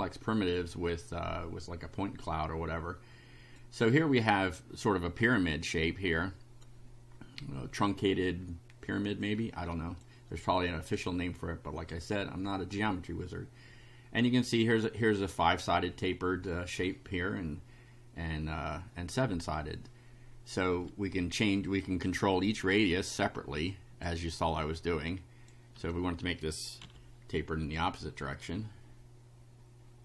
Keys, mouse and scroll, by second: 1.6-3.7 drag, 5.6-6.8 drag, 7.4 click, 9.2 click, 10.4 scroll up 1, 11.2 click, 13.1-14.4 drag, 22.1 click, 23.7 click, 25.1 click, 25.7 3, 26.8 F5, 27.8-30.0 right drag, 28.4-30.0 drag.